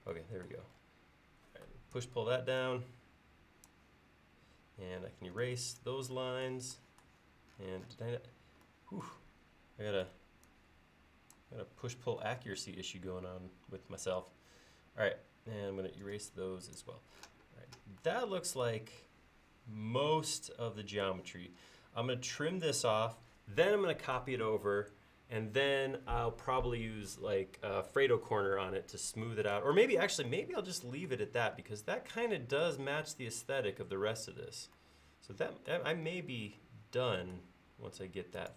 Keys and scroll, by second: 2.0 p, 5.2 e, 10.1 p, 16.1 e.